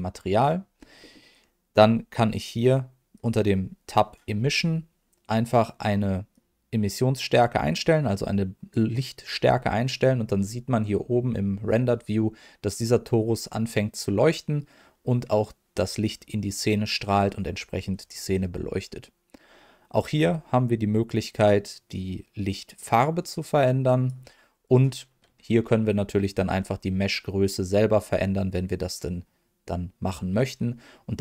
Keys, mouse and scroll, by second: 0.6-1.0 scroll up 1, 1.0 middle click, 1.7 scroll up 1, 3.1 click, 4.3-4.8 scroll up 1, 6.3-8.8 drag, 19.9 click, 24.6 click, 26.3 s, 30.3-31.2 right drag.